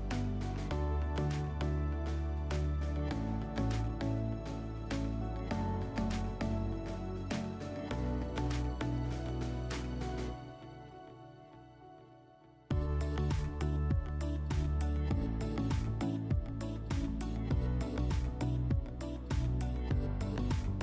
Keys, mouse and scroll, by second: 0.0 click, 0.6 click, 1.2 click, 2.0 click, 2.3 ctrl+click, 3.2 click, 3.8 click, 4.2 click, 4.6 click, 5.1 middle click, 6.5 click, 7.4 click, 7.7 click, 8.2 click, 9.4 click, 9.7 click, 9.9 click, 10.1 click, 10.9 click, 11.3 ctrl+click, 12.2 click, 13.0 click, 13.7 middle click, 14.1 alt+middle click, 14.8 click, 15.9 click, 16.2 ctrl+click, 16.7 click, 17.1 scroll, 17.4 click, 19.3 click, 19.5 ctrl+z, 19.9 click, 20.2 click.